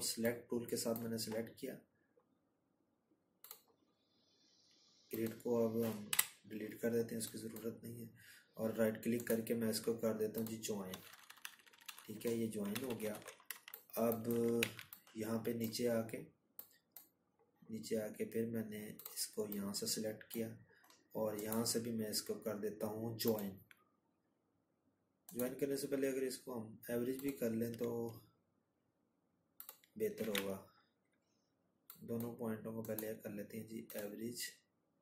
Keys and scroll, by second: 2.6 Delete, 7.4 ctrl+-, 7.6 ctrl+-, 26.7 ctrl+z.